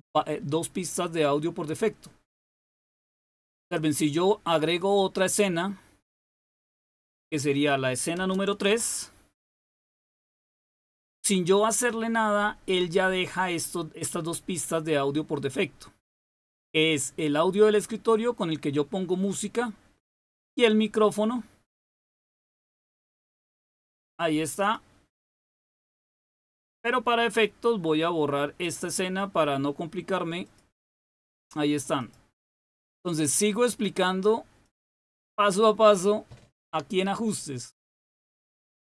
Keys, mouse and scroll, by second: 3.0 click, 4.7 click, 6.4 click, 8.1 BackSpace, 8.6 BackSpace, 10.5 click, 24.5 click, 26.0 click, 28.5 click, 30.3 click, 31.9 click, 33.6 click, 34.5 click, 38.3 click.